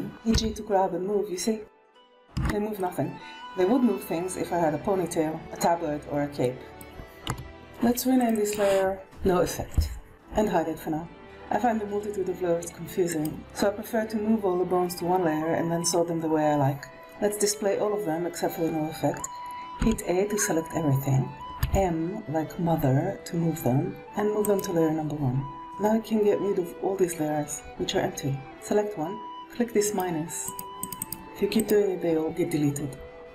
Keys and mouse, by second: 0.0 n, 0.2 g, 2.6-3.3 middle drag, 6.3-6.7 middle drag, 7.2 KP_1, 7.5 alt+a, 8.1 click, 8.3 click, 8.9 f, 10.0 alt+a, 13.0 click, 19.7 a, 21.5 m, 29.7 click, 30.7 click, 30.9 click.